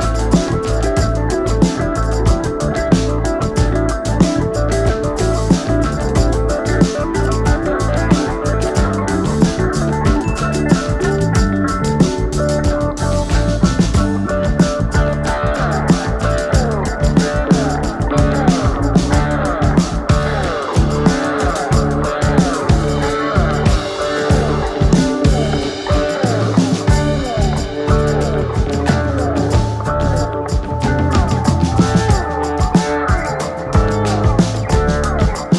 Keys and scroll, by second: 25.7 ctrl+alt+space.